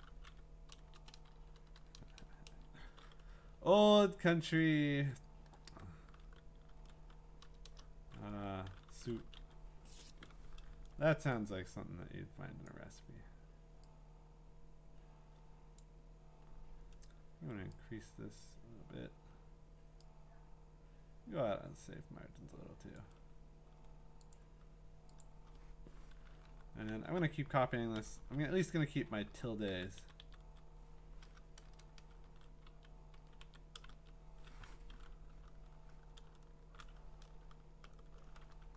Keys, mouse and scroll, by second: 0.0-2.5 typing, 6.1-9.9 typing, 12.6-15.7 drag, 18.4 click, 22.9 click, 24.4 click, 25.2 click, 26.8 shift+Up, 26.9 Left, 28.0 ctrl+c, 28.2 Down, 28.4 Down, 29.7 Down, 30.0 ctrl+Right, 30.2 ctrl+Right, 31.6 Return, 32.2 ctrl+v, 32.7 Down, 33.4 Right, 33.9 Down, 38.3-38.6 typing.